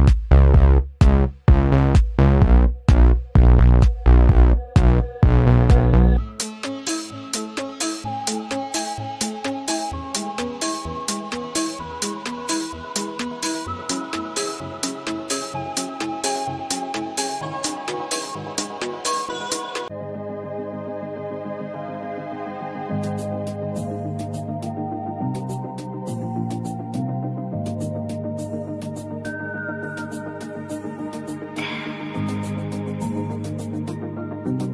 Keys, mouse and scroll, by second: 1.4-3.0 drag, 3.0-4.4 drag, 4.4-5.5 drag, 7.3 click, 8.4 right click, 10.4-14.7 drag, 14.7 space, 14.7 click, 14.9 space, 15.5 alt+scroll down 1, 16.0 click, 17.0 ctrl+z, 17.4-22.2 drag, 22.2 ctrl+z, 22.6 click, 25.1 click, 26.8 right click, 27.7 click, 28.6 right click, 30.9 click, 33.6 ctrl+z, 33.9 right click.